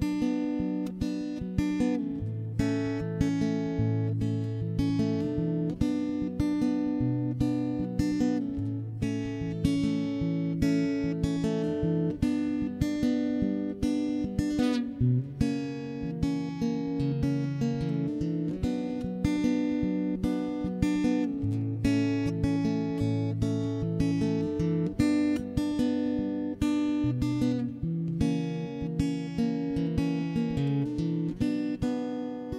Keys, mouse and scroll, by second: 0.2 ctrl+s, 1.1 middle click, 1.1 ctrl+z, 1.3 ctrl+z, 2.2 right click, 2.5 middle click, 3.7 click, 4.1 x, 4.6 middle click, 4.8 right click, 5.0 middle click, 5.9 middle click, 6.8 click, 7.7 x, 8.4 right click, 9.0 click, 9.6 click, 9.8 middle click, 10.2 click, 10.6-11.6 middle drag, 11.8 x, 12.3 middle click, 13.0 middle click, 13.3 ctrl+s, 13.6 right click, 13.7 middle click, 14.3 middle click, 14.7 Left, 15.0 ctrl+KP_3, 15.1 middle click, 16.1 middle click, 16.5 Tab, 16.9 alt+h, 17.1-18.1 middle drag, 18.3 middle click, 18.7 right click, 19.1 middle click, 20.3 ctrl+KP_3, 20.5 middle click, 21.3 d, 21.4 click, 21.4 d, 22.7 middle click, 23.2 middle click, 24.2 middle click, 24.8 middle click, 25.5 middle click, 26.0 middle click, 26.1 click, 26.6 ctrl+z, 26.6 middle click, 27.0 right click, 27.3 click, 27.4 middle click, 27.8 Tab, 28.1 a, 28.2 a, 28.7 ctrl+,, 28.9 middle click, 29.3 ctrl+KP_3, 29.3 middle click, 29.7 s, 31.0 middle click, 31.9 click.